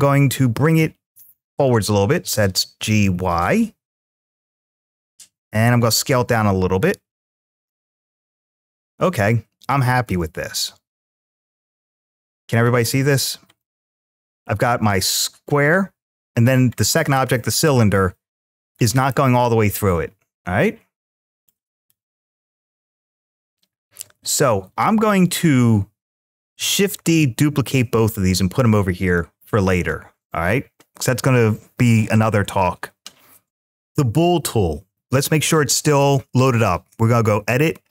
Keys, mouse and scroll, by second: 1.9 g, 4.2-4.7 drag, 4.7-5.9 middle drag, 5.9 s, 7.3 click, 7.8-12.5 middle drag, 13.4-16.4 middle drag, 16.6-17.9 middle drag, 18.7-21.7 middle drag, 22.4 click, 24.6-25.9 drag, 26.8 shift+d, 28.9 click, 29.6 click, 33.5 click, 35.7-37.9 drag.